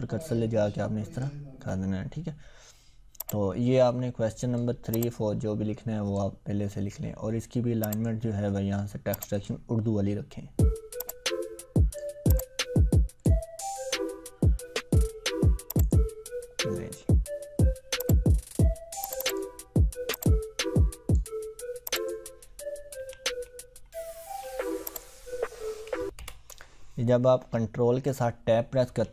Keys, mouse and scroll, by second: 3.3-4.8 drag, 22.9 ctrl+Tab, 24.9 click, 26.2 Left, 28.9 ctrl+Tab.